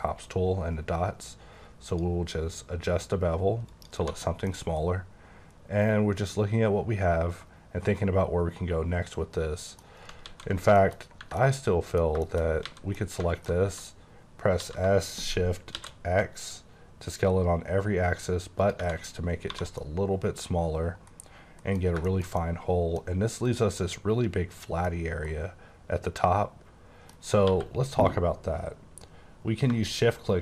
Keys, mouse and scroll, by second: 0.2 click, 3.8 click, 4.0 1, 4.2 scroll down 3, 4.7 middle click, 9.9 scroll up 1, 10.2 ctrl+z, 10.8 shift+middle click, 11.0 shift+scroll up 2, 11.2 Tab, 11.4 middle click, 12.2 middle click, 12.4 scroll up 3, 12.6 a, 12.9 middle click, 13.2 alt+middle click, 14.3-14.6 scroll, 14.6 s, 15.8 shift+x, 18.6 click, 18.8 Tab, 18.9 scroll down 4, 19.5 1, 19.8 middle click, 21.8 scroll down 1, 22.1 shift+middle click, 22.7 middle click, 23.4 click, 24.8 middle click, 27.5 q, 29.7 shift+q.